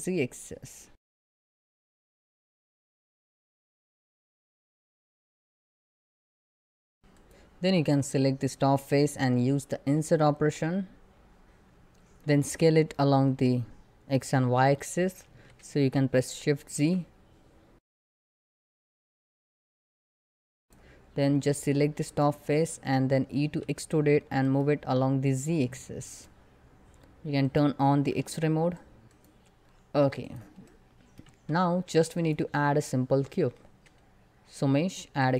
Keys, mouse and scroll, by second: 5.1 s, 5.2 ctrl+click, 5.7 click, 6.7 middle click, 7.0 click, 15.0 s, 16.4 shift+z, 17.9 shift+click, 19.3 s, 19.8 ctrl+click, 20.0 middle click, 20.6 click, 23.1 e, 24.1 right click, 24.9-29.0 drag, 30.5 middle click, 31.0 Tab, 31.8 click, 33.2 shift+a, 34.8 click.